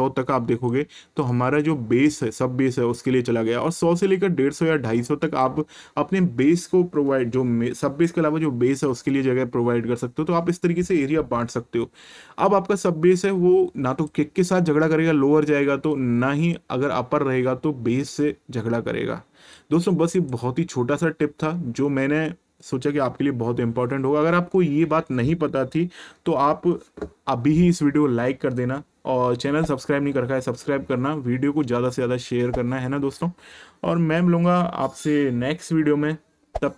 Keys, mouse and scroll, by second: 3.8 click, 12.4 click, 15.9 click, 19.5 click.